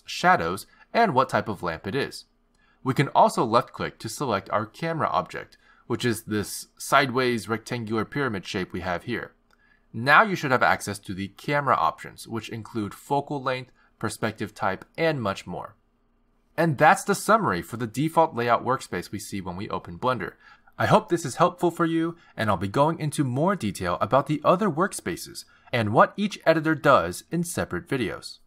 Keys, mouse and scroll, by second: 0.0 click, 0.3 click, 1.0 click, 1.4 click, 1.8 click, 2.4 click, 5.9 click.